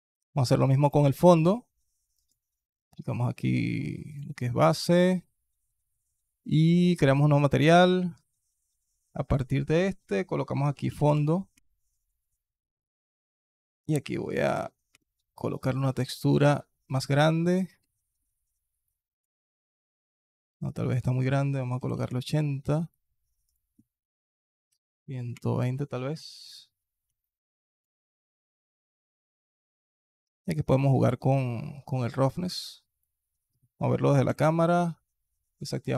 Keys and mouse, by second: 0.7 click, 2.0-4.0 drag, 7.4-8.5 drag, 12.7-14.8 drag, 15.7-16.1 alt+drag, 17.1-17.4 alt+drag, 17.7-18.1 alt+drag, 18.7 alt+click, 20.7-21.9 drag, 23.3-25.2 drag, 27.0-27.6 alt+drag, 28.5 alt+click, 30.2 middle click, 30.9 middle click, 31.7-32.9 drag, 34.1 KP_0, 35.8 click.